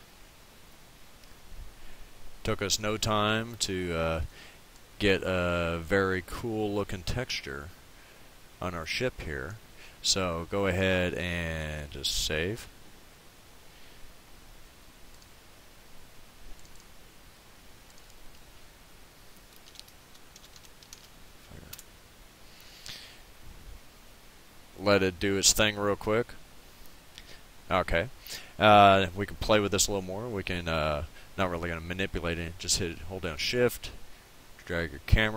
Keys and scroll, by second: 19.5-21.5 typing, 21.7 Return.